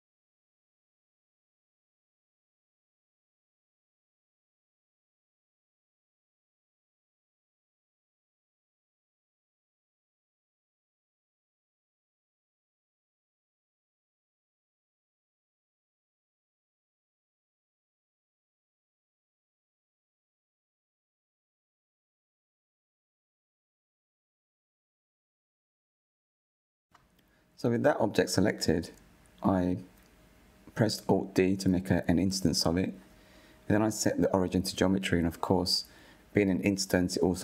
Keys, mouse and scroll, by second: 0.5 click, 1.1 click, 1.4-2.7 middle drag, 2.7-3.1 scroll up 2, 3.1-5.6 shift+middle drag, 5.6-5.9 scroll down 5, 5.9-8.0 shift+middle drag, 8.0 KP_1, 8.7-9.3 scroll up 5, 9.3-10.1 shift+middle drag, 10.1 click, 11.6 Tab, 12.6 3, 13.1 a, 14.0 s, 20.8 Tab, 21.5-22.0 scroll down 5, 22.0 click, 22.8-25.6 middle drag, 25.6 KP_1, 26.3 click, 26.3 scroll, 28.0 alt+d, 30.3 click, 33.6-36.8 right drag.